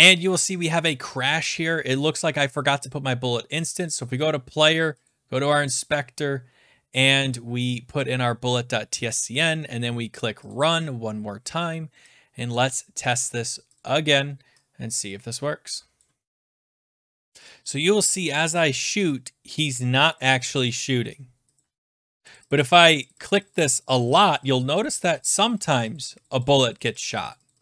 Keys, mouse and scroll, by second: 3.9 click, 5.0 click, 6.8 click, 7.2-7.9 scroll down 4, 9.0 click, 10.5 click, 10.9-11.2 scroll, 12.5 click, 13.1 click, 13.8 click, 16.0 click, 16.9 click, 17.7 click, 18.3 click, 19.1 click, 19.6 click, 20.2 click, 20.8 click, 21.6 click, 22.1 click, 22.3 click, 22.5 click, 22.6 click, 22.8 click, 22.9 click, 23.1 click, 23.3 click, 23.5 click, 23.6 click, 23.7 click, 23.8 click, 23.9 click, 24.1 click, 24.2 click, 24.3 click, 24.5 click, 24.7 click, 24.8 click, 25.0 click, 25.1 click, 25.2 click, 25.7-26.9 drag.